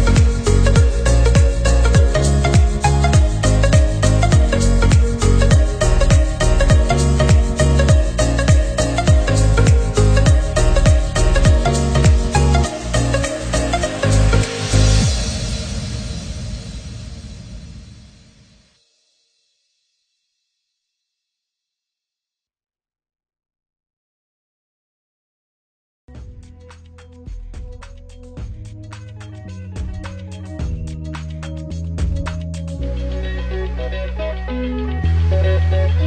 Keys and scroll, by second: 1.1 ctrl+c, 25.3 ctrl+c.